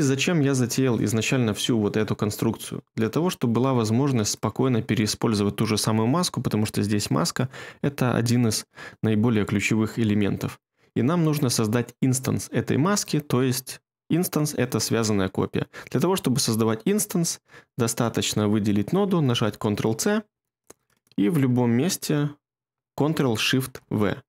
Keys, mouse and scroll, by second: 19.2 ctrl+c.